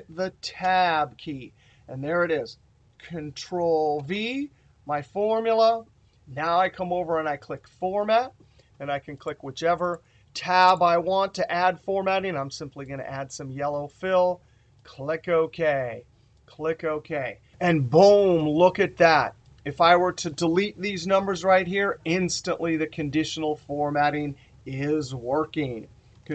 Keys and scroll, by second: 2.7 ctrl+v.